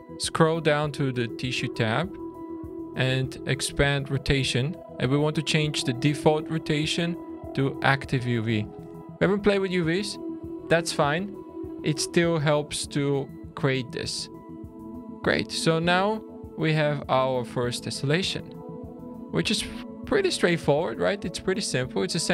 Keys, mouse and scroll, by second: 2.0-4.7 scroll down 6, 5.8 click, 13.9 scroll down 3, 14.4 middle click, 14.9 middle click, 15.9 shift+middle click, 17.2-17.9 scroll up 5, 17.9 middle click, 18.4-19.0 scroll down 3, 19.0 scroll up 1, 22.0-22.3 scroll up 2.